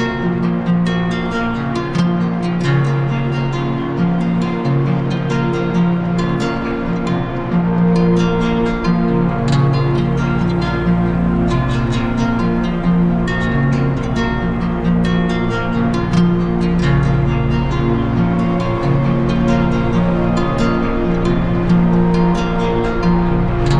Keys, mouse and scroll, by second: 0.4 click, 0.8 ctrl+z, 3.8 click, 6.4 shift+click, 6.7 ctrl+z, 9.1 shift+click, 10.3 shift+click, 11.1 shift+click, 12.0 shift+click, 13.7 shift+click, 15.2 shift+click, 17.2 shift+click, 19.7 shift+click, 20.6 shift+click, 21.4 click, 22.5 click, 23.0 click.